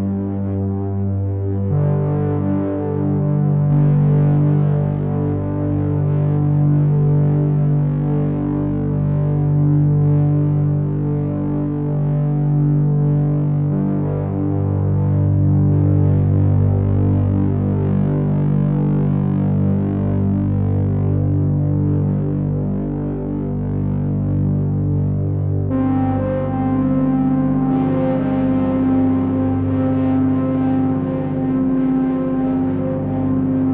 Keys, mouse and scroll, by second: 4.4 click, 7.5 shift+click, 8.8 ctrl+a, 13.1 click, 14.4 shift+click, 15.8 ctrl+a, 23.4 click, 24.9 ctrl+a, 31.1 click, 32.9 g.